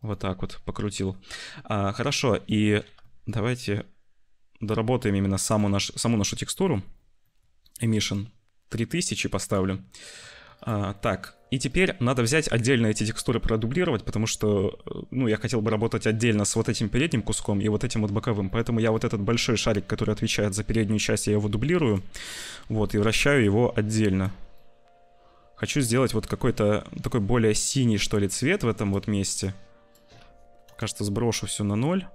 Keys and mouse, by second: 0.8 ctrl+s, 2.0 click, 2.4 click, 3.1-5.4 shift+drag, 6.1 click, 6.5 click, 7.2 click, 7.5 click, 9.4 click, 9.9 shift+middle click, 10.9 click, 12.1 click, 18.8 click, 22.5 click, 22.8 click, 23.4 click, 24.4-28.0 drag, 28.0 middle click, 29.4 middle click, 30.5 BackSpace, 31.6-32.1 drag.